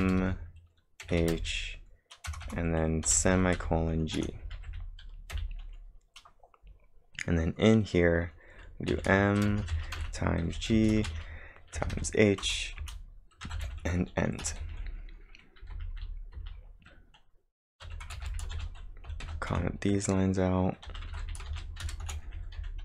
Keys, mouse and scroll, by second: 0.0-1.7 typing, 3.1-5.3 typing, 6.9 scroll down 2, 8.9-12.0 typing, 12.4 Return, 12.8 Return, 13.4-16.7 typing, 17.9-22.8 typing, 18.3 ctrl+v, 18.3 ctrl+j, 21.1 ctrl+v, 21.2 ctrl+j, 22.3 ctrl+j.